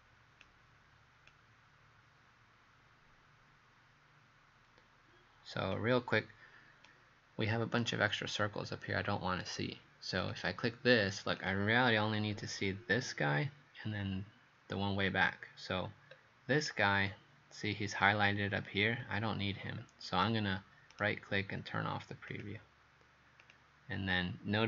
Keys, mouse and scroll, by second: 6.9 right click, 8.6-10.3 scroll up 2, 10.3 click, 12.1-12.7 scroll down 3, 15.8-16.6 scroll up 3, 16.6 click, 18.6-19.0 scroll up 2, 19.8-20.9 scroll down 1, 20.9 right click, 22.4 click, 24.0 scroll down 1.